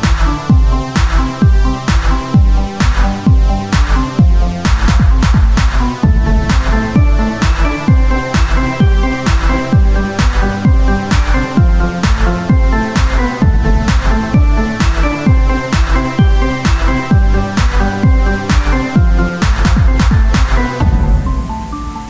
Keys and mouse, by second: 2.0 click, 2.7 KP_1, 5.2 z, 8.8 z, 8.9 Tab, 9.8 click, 11.4 e, 12.6 ctrl+z, 13.2 e, 15.6 click, 16.2 ctrl+z, 16.5-18.2 drag, 16.5 o, 20.3 KP_3.